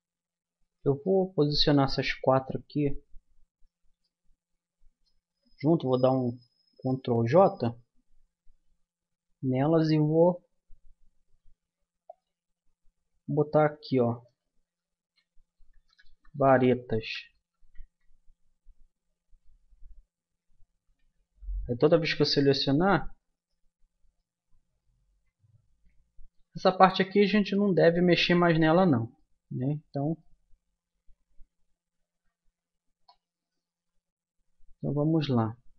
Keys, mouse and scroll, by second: 1.0-6.6 middle drag, 6.6 ctrl+j, 9.0 n, 12.2-13.8 drag, 20.2 n, 22.2-24.2 drag, 24.2-25.2 middle drag, 25.3 middle click, 28.6 Tab, 29.7 Tab, 32.0-35.7 middle drag.